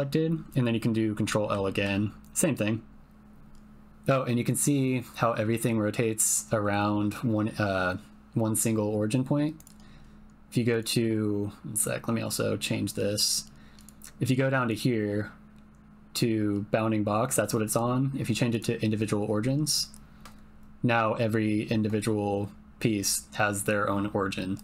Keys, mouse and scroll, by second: 1.4 ctrl+l, 10.7-13.7 drag, 14.6-18.6 drag, 24.5 middle click.